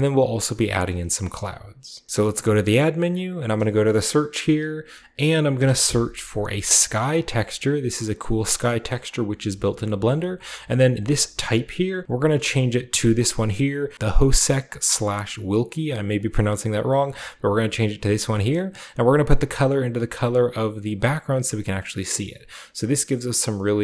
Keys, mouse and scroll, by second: 0.0 shift+middle click, 0.8 scroll up 2, 0.8 middle click, 1.2 a, 1.4-3.4 middle drag, 2.0 scroll down 2, 2.6 shift+a, 3.5-4.9 shift+drag, 5.6 typing, 7.2 click, 8.3 click, 9.0 click, 11.0 click, 16.1 click, 17.0 click, 17.4 click, 18.0 click, 18.3 click, 19.1-20.4 drag, 20.8 click, 21.5 click, 21.9 scroll down 2.